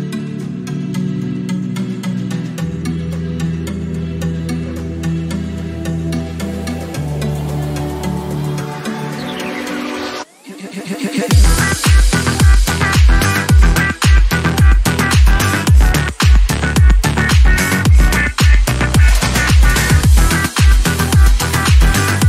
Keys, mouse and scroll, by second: 2.9 Tab, 4.2 right click, 4.5 click, 9.1 click, 10.6 click, 12.5-14.1 middle drag, 14.1 click, 17.1 click, 19.4-19.9 scroll down 3, 19.9 middle click, 20.2 scroll up 3, 20.8 click, 21.5 scroll down 5, 21.8 click.